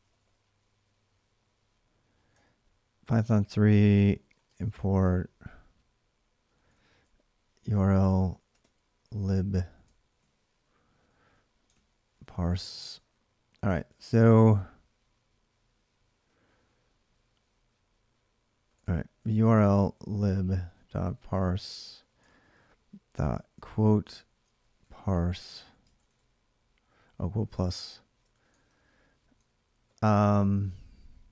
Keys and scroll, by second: 0.0-0.7 typing, 2.1 Return, 3.4-4.7 typing, 4.8 ctrl+a, 7.0-9.5 typing, 9.7 ctrl+a, 10.0 ctrl+a, 11.6-12.8 typing, 13.5 ctrl+a, 13.7 ctrl+a, 18.8-21.8 typing, 22.0 ctrl+a, 22.2 ctrl+a, 23.4-25.8 typing, 27.0-30.0 typing, 30.0 Left.